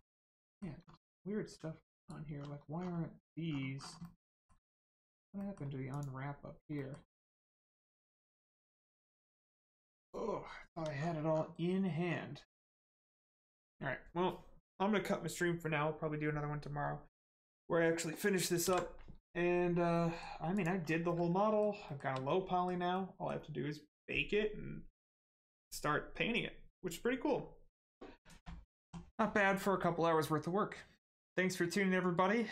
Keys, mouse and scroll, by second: 0.0 middle click, 0.4 shift+middle click, 0.8 scroll up 1, 1.4 g, 2.0 right click, 2.3 scroll down 1, 4.0 middle click, 4.7 scroll down 1, 5.1 Tab, 5.4 middle click, 5.9 click, 6.7 middle click, 7.1 Tab, 7.5 middle click, 8.0 Tab, 8.4 click, 8.7 middle click, 9.0 Tab, 9.4 click, 9.7 Tab, 10.0 click, 10.7 Tab, 10.9-11.3 scroll down 1, 13.3 middle click, 18.6 ctrl+s, 19.9 middle click, 20.5 click, 20.8 scroll down 1, 21.1 middle click, 21.9 shift+middle click, 22.3 middle click.